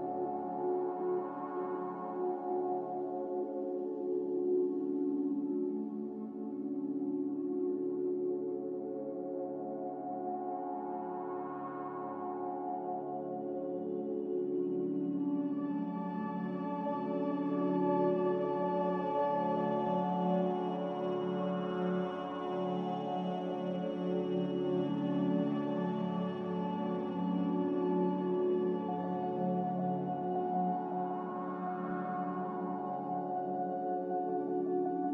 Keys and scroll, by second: 1.6 ctrl+v, 2.0 ctrl+c, 4.1 Escape, 6.6 g, 7.9 5, 8.0 Return, 11.1 z, 18.9 g, 21.0 z, 32.8 z.